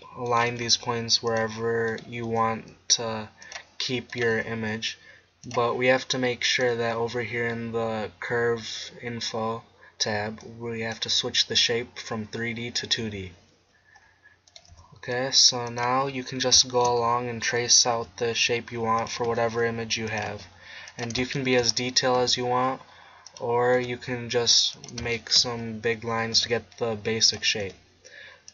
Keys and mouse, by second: 0.5 g, 2.2 g, 4.3 g, 10.4-12.3 drag, 14.0 middle click, 14.7 g, 15.8-16.7 drag, 19.1 g, 19.3 e, 20.3 e, 22.2 e, 23.8 e, 25.1 click, 26.4 e, 27.4-28.5 drag, 27.7 e.